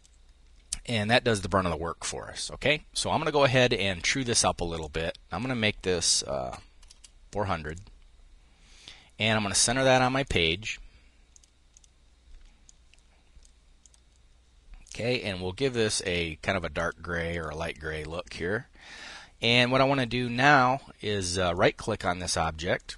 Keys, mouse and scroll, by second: 4.5 click, 6.1 4, 7.3 Return, 9.3-12.0 drag, 12.3 click, 13.5 click, 14.5-16.0 drag, 16.4 click, 16.9 click, 21.1 click, 22.0 click.